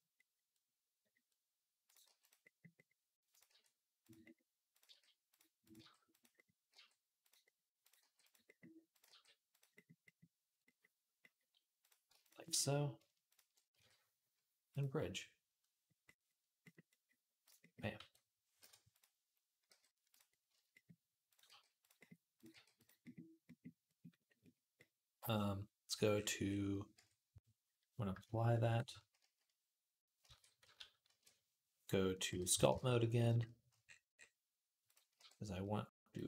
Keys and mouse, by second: 1.6 click, 1.8 g, 3.1 click, 3.3 g, 4.5 click, 4.7 g, 4.7-12.8 middle drag, 5.4 click, 5.4 right click, 5.6 g, 6.5 g, 7.8 g, 8.9 g, 12.8 shift+a, 13.0 shift+click, 13.5 q, 17.8 g, 18.7 click, 19.5 g, 20.6-27.1 middle drag, 21.2 g, 22.2 click, 22.3 g, 26.8 Tab, 30.1 shift+d, 30.9 ctrl+a, 31.2-33.9 drag, 32.1 /, 32.5 ctrl+Tab, 33.9 middle click, 34.7-36.2 drag, 34.9 q.